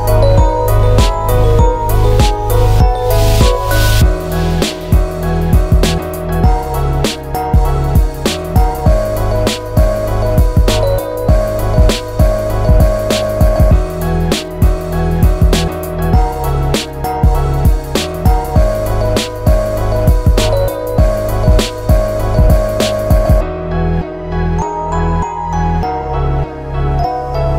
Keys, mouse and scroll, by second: 1.1 scroll up 5, 2.2 middle click, 2.7 Tab, 3.1 alt+click, 3.3 alt+shift+click, 3.9 scroll down 8, 5.1 u, 6.4 ctrl+z, 6.7 middle click, 7.2 shift+middle click, 7.5 middle click, 7.8 Tab, 8.2 click, 8.6 shift+click, 8.8 right click, 9.5 middle click, 12.2 alt+click, 12.7 alt+shift+click, 13.4 u, 14.1 Tab, 14.5 middle click, 16.7-17.4 scroll down 6, 17.4 shift+middle click, 17.7 middle click, 19.8 click, 20.0 alt+q, 20.5-21.3 scroll down 5, 21.1 middle click, 21.7 scroll down 1, 21.9 shift+middle click, 22.3 middle click, 23.0 scroll up 2, 23.7 click, 24.1 Tab, 25.4 middle click, 26.2 u.